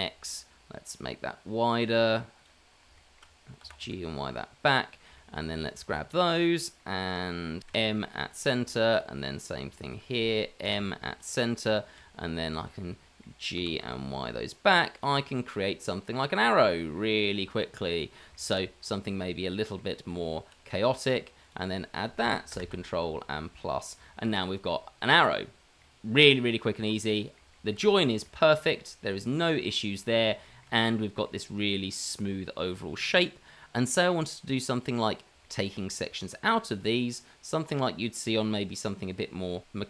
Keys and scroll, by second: 3.6 g, 5.4 g, 6.1 g, 7.7 m, 8.9 m, 10.0 m, 10.6 m, 12.0 m, 12.6 m, 13.5 g, 20.1 Tab, 21.8 Tab, 23.3 KP_Add, 24.2 KP_Add.